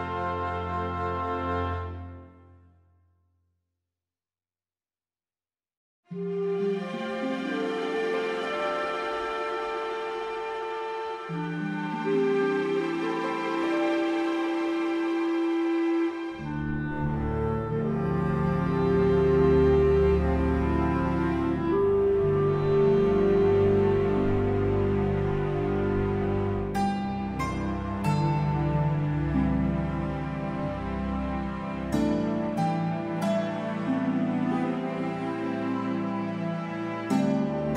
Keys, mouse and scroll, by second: 0.0 middle click, 0.4 click, 1.9 click, 2.1 KP_0, 2.3 ctrl+space, 2.3-2.8 scroll up 9, 2.6 shift+middle click, 2.8 click, 3.3 r, 4.4 click, 4.7 g, 6.2 click, 6.2 s, 7.0 r, 9.2 click, 9.6 g, 10.7 middle click, 10.7 s, 11.0 KP_Decimal, 11.2 scroll down 5, 11.3 middle click, 11.4 shift+middle click, 11.6 scroll up 1, 11.7 click, 12.5 click, 12.5 scroll up 4, 12.8 x, 13.4 scroll down 5, 13.7 click, 14.2 s, 14.9 alt+a, 14.9-15.4 scroll down 12, 15.4 scroll up 1, 15.6 scroll down 1, 15.9 scroll down 2, 16.0 middle click, 16.2-16.7 scroll up 2, 16.3 middle click, 17.0 scroll down 1, 17.2 scroll up 1, 17.4 middle click, 17.8 ctrl+s, 20.1 scroll down 4, 20.2-20.7 scroll up 8, 20.3 middle click, 20.7 middle click, 20.9 click, 21.2 click, 22.5 alt+a, 22.5 scroll up 4, 22.6-23.2 scroll down 21, 23.0-23.4 scroll up 3, 23.5 scroll down 1, 23.7 scroll down 1, 24.0 middle click, 24.3 shift+middle click, 24.4 scroll down 1, 24.4 scroll up 1, 24.5 middle click, 24.7-25.1 scroll down 1, 25.1 scroll up 1, 25.6 scroll down 6, 25.7 scroll up 4, 25.9 ctrl+space, 26.0 scroll down 1, 26.1 middle click, 26.2 ctrl+space, 26.2-27.1 scroll up 6, 27.5 shift+middle click, 27.6-28.1 scroll up 3, 27.7 middle click, 30.3 scroll down 4, 30.5 click, 30.6 scroll down 1, 30.8 shift+g, 31.4 ctrl+space, 31.5 scroll down 2, 31.5 shift+middle click, 31.8 middle click, 32.3 click, 32.4 alt+a, 33.1 click, 33.5 middle click, 33.7 KP_0, 33.9 scroll down 10, 33.9 shift+middle click, 34.4 scroll up 3, 35.0 click, 37.3 click, 37.5 alt+a, 37.5 scroll down 5, 37.6 scroll up 3, 37.7 middle click.